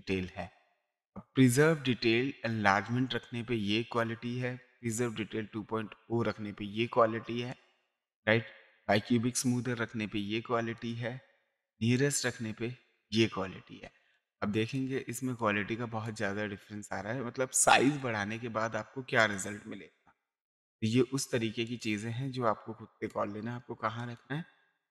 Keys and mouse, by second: 4.8 click, 7.5 click, 8.7 click, 10.8 click, 12.0 click, 13.8 space, 14.1 click, 15.4 click, 17.9 click, 19.2 click, 20.6 click, 21.7 click, 23.0 click.